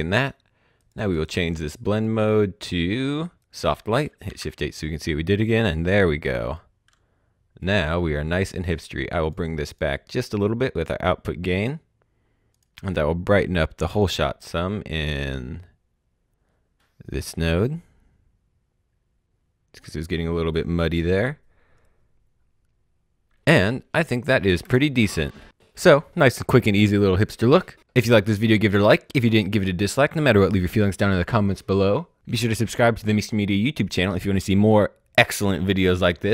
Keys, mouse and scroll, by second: 1.1 right click, 1.8 click, 3.3 click, 4.2 h, 7.6 click, 10.2 click, 12.4 click, 17.4-18.6 scroll up 1, 18.6-19.8 scroll down 1, 24.6 space.